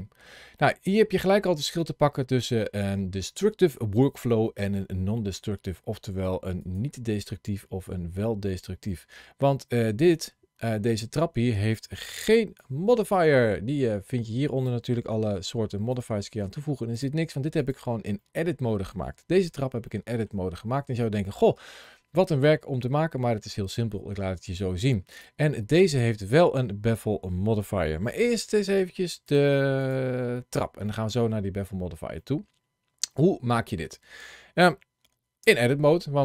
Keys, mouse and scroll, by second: 0.4 middle click, 1.1-1.8 scroll down 1, 1.8-5.1 scroll up 1, 5.7 scroll down 1, 6.4 click, 9.8 click, 12.1 ctrl+shift+a, 15.8 click, 16.8 click, 18.0 middle click, 19.3 scroll up 1, 19.8 shift+middle click, 20.4 middle click, 21.7 middle click, 22.8 middle click, 23.5 middle click, 24.9 click, 28.0 shift+middle click, 29.1 click, 29.6 click, 30.2 shift+middle click, 30.7 middle click, 31.6 scroll up 1, 32.0 shift+middle click, 35.3 Tab.